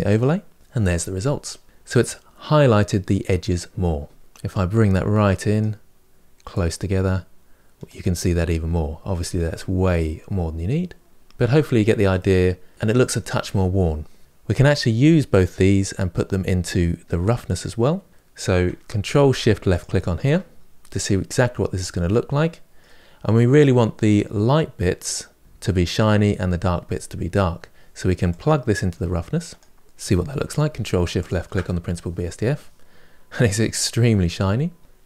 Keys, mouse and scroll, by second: 4.2-9.3 drag, 9.5-11.2 drag, 11.2-12.0 scroll down 3, 12.0 middle click, 18.1-19.6 drag, 20.8-21.4 scroll up 3, 21.8 middle click, 22.1 middle click, 22.3 middle click, 23.1-23.8 scroll up 2, 29.4 click, 31.1 ctrl+shift+click, 34.7-35.0 drag.